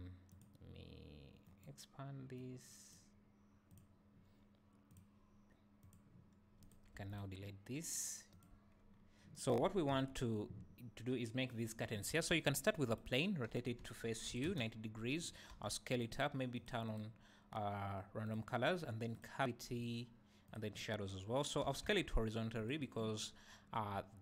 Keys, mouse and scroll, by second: 0.3 click, 1.4 click, 2.3-3.9 drag, 5.0-6.7 drag, 6.9 x, 7.6-8.3 scroll down 2, 8.3 click, 8.5 n, 8.9-9.9 scroll down 1, 9.9 KP_1, 12.3 shift+a, 13.5 r, 15.2 click, 15.5 s, 16.0 click, 16.5 click, 16.8-22.7 drag, 21.7 s, 23.9 scroll down 1, 24.0 `.